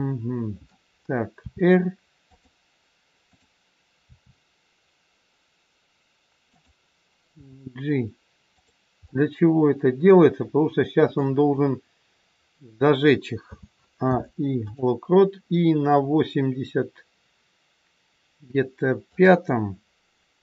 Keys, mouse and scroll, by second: 1.4 r, 3.1 click, 4.0 r, 7.3 g, 9.0 middle click, 13.4 a, 14.0 i, 19.0 click.